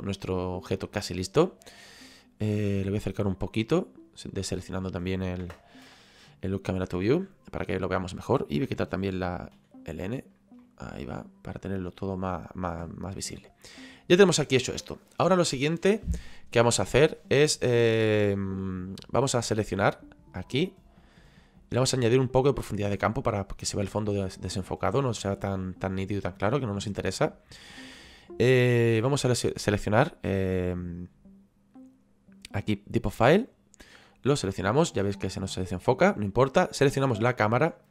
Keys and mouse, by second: 2.8 click, 4.4 middle click, 5.4 KP_0, 6.3 shift+middle click, 10.6 shift+middle click, 11.2 ctrl+middle click, 20.5 click, 33.5 click, 36.8 click.